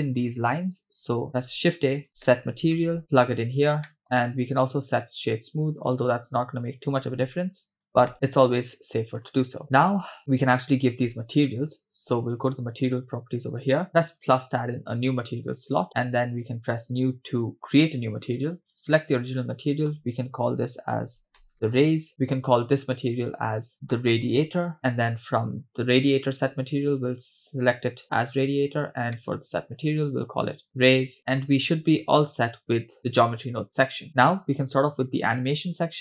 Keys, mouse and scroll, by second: 1.4 shift+a, 3.9 middle click, 4.0 click, 4.6 click, 5.9 click, 6.9 shift+a, 9.8-10.2 scroll down 2, 10.2-11.1 scroll up 4, 12.7 click, 14.4 click, 16.3 click, 18.7 click, 19.6-21.7 drag, 22.5 click, 23.7-24.8 drag, 26.3-28.0 drag, 29.1 middle click, 29.8-30.9 drag, 31.2-31.9 scroll down 2, 31.9-33.2 scroll down 1, 33.2-34.0 scroll down 1.